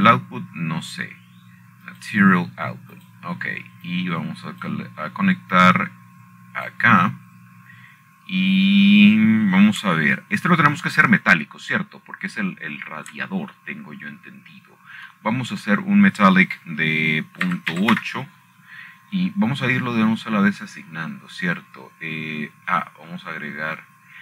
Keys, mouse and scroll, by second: 1.5-3.1 shift+middle drag, 1.9 shift+a, 4.6 click, 5.7-6.4 drag, 6.6-7.4 drag, 8.3-9.9 drag, 11.1-12.4 scroll up 3, 14.1 shift+middle click, 14.5 scroll down 1, 14.6 scroll up 1, 14.6 scroll down 1, 14.8-16.3 scroll up 12, 16.3-17.8 shift+middle drag, 18.3-19.3 drag, 20.9 Return, 22.2-24.2 scroll up 1.